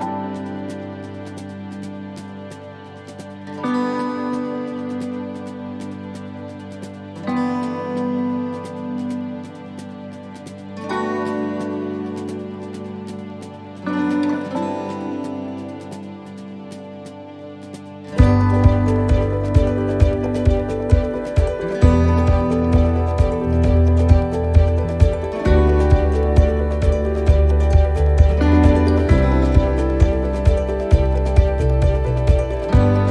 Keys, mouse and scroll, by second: 1.1 alt+shift+right click, 2.0 middle click, 3.2 click, 5.5 middle click, 6.7 middle click, 7.3 scroll down 2, 7.7 shift+middle click, 7.8 shift+middle click, 9.6 shift+middle click, 9.6-10.0 scroll up 1, 10.3 right click, 11.4 l, 12.1 l, 12.6 l, 13.2 l, 25.0 click, 25.0 shift+d, 30.1 shift+middle click, 30.1 s.